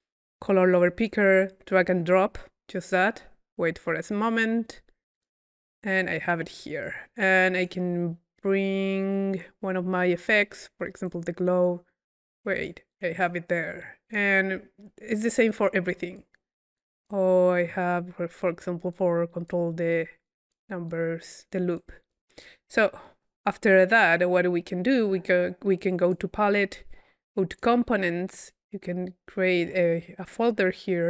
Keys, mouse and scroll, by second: 6.0-7.8 drag, 12.6-13.6 drag, 16.8-17.6 drag, 20.0-21.5 drag, 21.8 click, 22.5 click, 23.7 click, 24.5-25.0 drag, 26.0-26.7 drag, 26.9-27.5 middle drag, 27.5 click, 28.2 click, 28.4 right click.